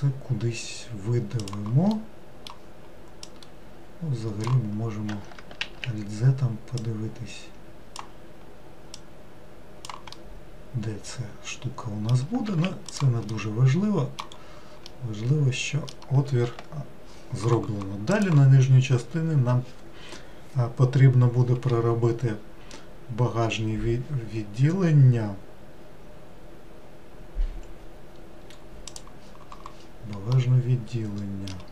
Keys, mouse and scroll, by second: 2.0-3.3 middle drag, 3.3 click, 5.7 alt+z, 6.8 click, 9.0 click, 10.2-12.5 middle drag, 12.5 alt+z, 13.0 click, 13.4-14.5 middle drag, 14.5 scroll down 2, 15.0-18.1 middle drag, 30.4-31.7 middle drag.